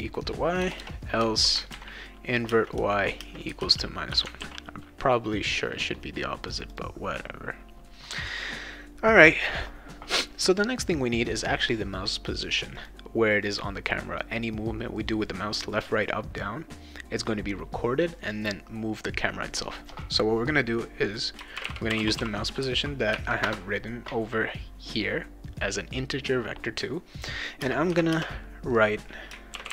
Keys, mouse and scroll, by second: 0.6 BackSpace, 0.8 BackSpace, 1.7 ctrl+v, 2.5-4.1 typing, 4.4 ctrl+s, 6.7 click, 12.8 click, 13.4 click, 13.9 click, 21.3-22.6 typing, 23.4 Return, 27.6 space, 27.9 =, 28.1 space, 29.3-29.7 typing.